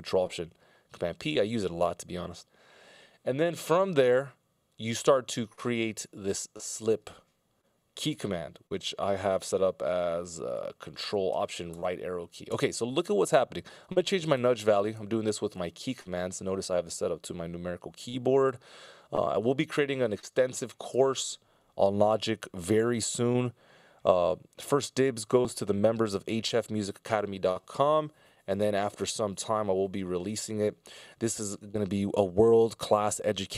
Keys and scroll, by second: 11.7 ctrl+alt+Right, 12.8 ctrl+alt+Left, 14.2 F17, 14.4 =, 14.9 F17, 15.0 =, 15.4 F17, 15.6 =, 16.0 F17, 20.9 F17.